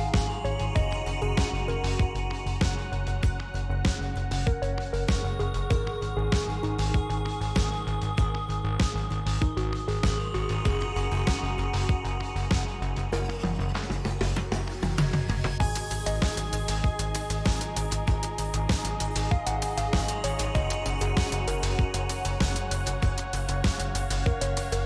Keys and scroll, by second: 2.3 shift+s, 8.8 Delete, 12.4 s.